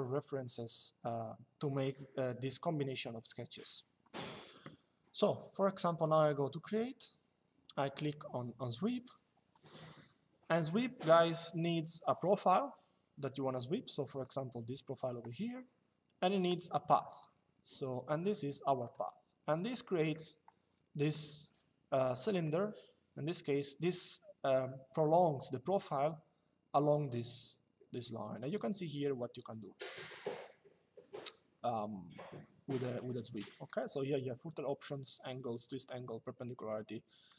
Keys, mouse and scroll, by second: 5.7 click, 9.2 click, 13.9 click, 16.8 click, 18.5 click, 22.2 click, 37.0 click.